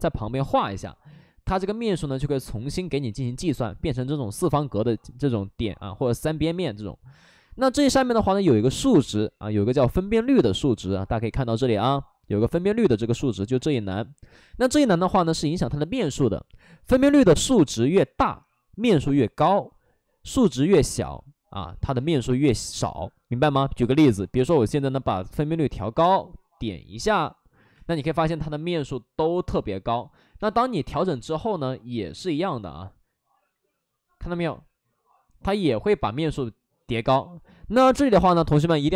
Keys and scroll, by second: 4.3 ctrl+z, 4.7 ctrl+z, 5.1 ctrl+z, 5.5 ctrl+z, 5.9 ctrl+z, 27.7 space, 30.2 3, 30.3 space.